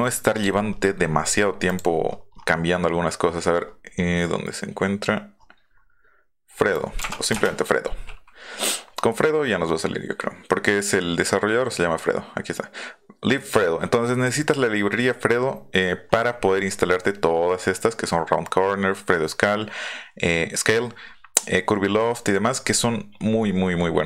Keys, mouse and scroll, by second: 0.7 scroll down 1, 1.0-1.5 scroll up 1, 1.7 click, 2.0-2.8 scroll down 2, 3.3 scroll down 2, 3.9 scroll down 2, 5.2 scroll up 2, 5.7 scroll up 2, 6.7 click, 7.0 BackSpace, 7.3 Return, 19.0 scroll down 2, 22.1-22.6 scroll down 2, 22.6-23.0 scroll up 2, 23.4 scroll down 2.